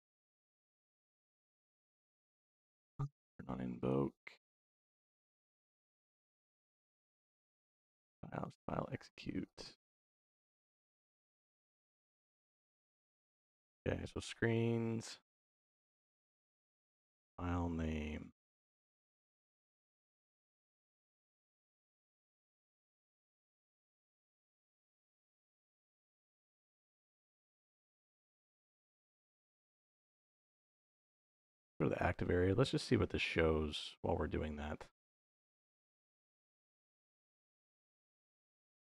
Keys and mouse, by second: 1.5 click, 2.9 click, 3.7 click, 4.3 click, 23.5 middle click, 23.8 click, 25.0 shift+v, 25.8 click, 26.5 middle click, 27.4 click, 28.6 middle click, 29.8-31.0 drag, 32.1 middle click, 32.7 middle click, 33.5-35.0 drag, 36.3 middle click, 38.0 click, 38.8 shift+d.